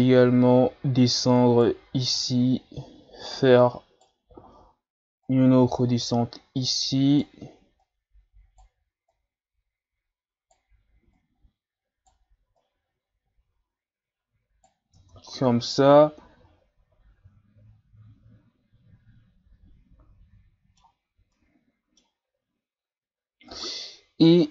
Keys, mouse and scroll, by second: 2.2 right click, 4.5 shift+scroll down 1, 5.3 right click, 7.8 right click, 9.1 right click, 11.2 right click, 12.6 right click, 15.0 Tab, 15.3-15.7 scroll down 4, 15.7-18.7 middle drag, 21.3-23.5 middle drag, 23.5 right click, 24.4 scroll down 3.